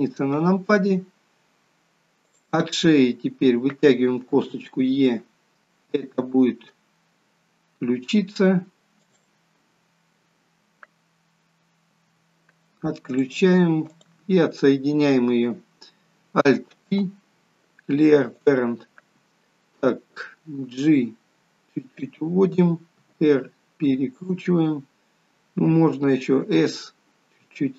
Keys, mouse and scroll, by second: 1.0-1.9 scroll down 2, 2.5 click, 4.5 e, 13.3 click, 14.2 click, 17.1 alt+p.